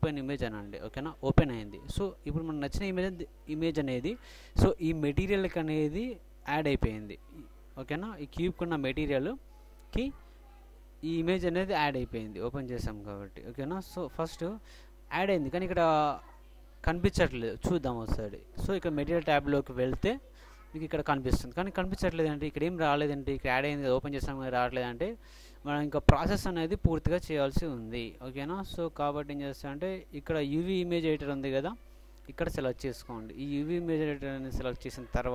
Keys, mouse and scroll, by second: 1.2 click, 17.7-20.3 drag, 26.1 click, 26.2 middle click, 26.5 click, 26.6 middle click, 26.6 click, 26.7 middle click, 26.8-27.9 drag, 28.8-30.4 drag.